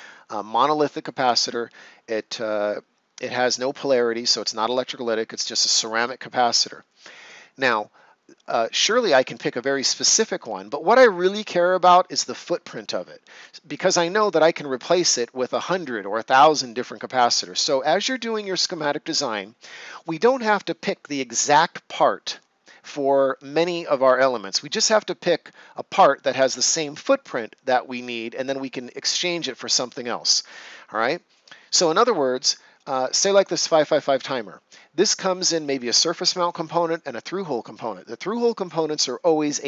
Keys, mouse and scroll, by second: 32.2 right click.